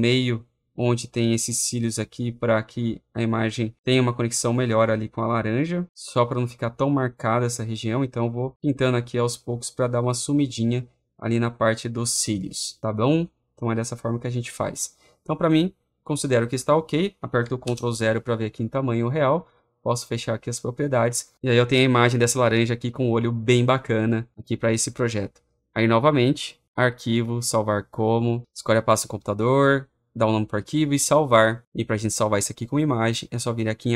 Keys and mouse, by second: 0.2 click, 0.7 click, 1.0 click, 1.3 click, 1.5 click, 1.7 click, 2.7 click, 3.1 click, 3.9-8.5 click, 6.8-10.8 drag, 12.2 click, 13.5 click, 17.3 click, 17.5 ctrl+0, 20.4 click, 26.7 click, 27.5 click, 28.4 Right, 30.7 click, 33.6 click.